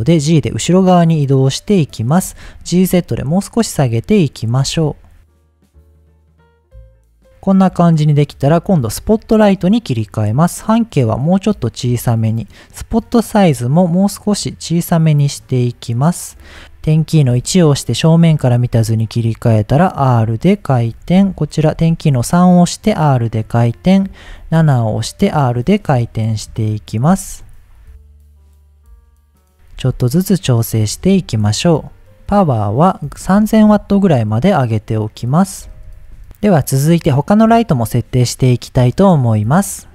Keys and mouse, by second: 0.4 g, 0.8 click, 1.4-2.0 middle drag, 2.2 g, 2.3 z, 3.9 click, 4.6 KP_7, 5.2 g, 6.5-9.3 drag, 10.5-12.0 drag, 12.8-16.4 drag, 17.3 KP_1, 18.6 r, 20.3 drag, 21.0 KP_3, 21.8 r, 22.8 click, 23.4 KP_7, 24.3 r, 25.5 click, 26.4 KP_1, 27.1 r, 28.1 click, 28.3 KP_3, 28.6 r, 29.0 click, 29.2 KP_7, 29.7 r, 30.6 click, 31.4-31.8 middle drag, 32.2-36.2 drag, 33.6 KP_0, 36.0 KP_0, 39.5 middle click.